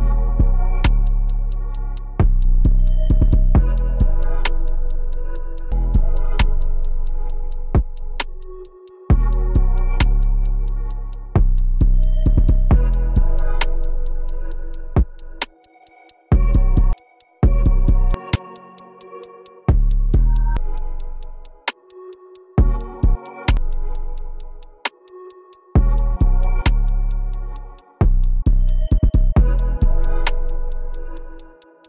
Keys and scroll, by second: 0.9 2, 6.0 t, 23.5 ctrl+a.